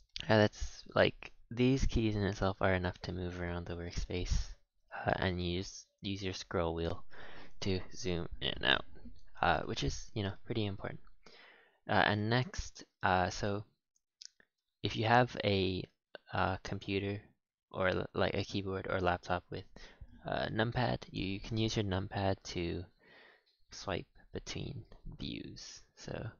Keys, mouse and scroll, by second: 0.3-0.6 scroll down 1, 0.6-4.8 middle drag, 4.8-5.2 scroll up 3, 5.2-6.1 scroll down 8, 6.1-7.0 scroll up 12, 7.0-8.5 scroll down 8, 8.5-11.8 middle drag, 11.8 scroll up 1, 12.1-17.6 shift+middle drag, 22.7 KP_1, 24.2 KP_3.